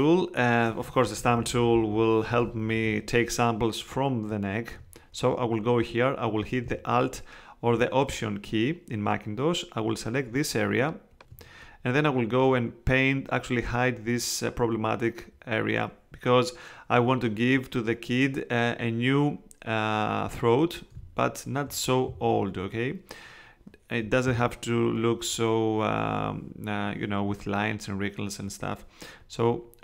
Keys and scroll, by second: 1.2 ].